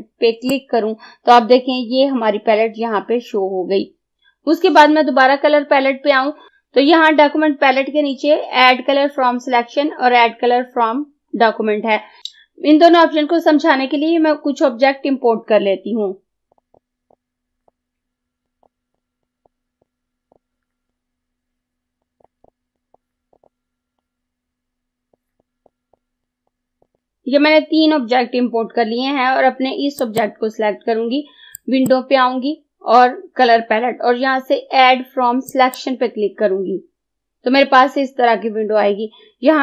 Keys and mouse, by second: 16.5 click, 17.7 click, 20.9 click, 24.0 click, 30.0-35.5 drag, 35.5 click.